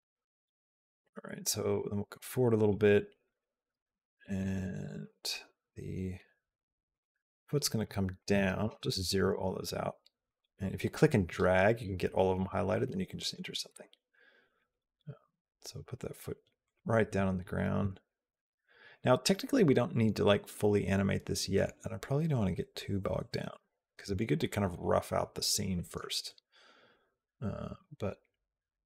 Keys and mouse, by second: 1.5-2.5 drag, 3.1 click, 3.7 e, 4.6 r, 7.6 click, 11.1 click, 13.0 click, 13.3 g, 23.3 click.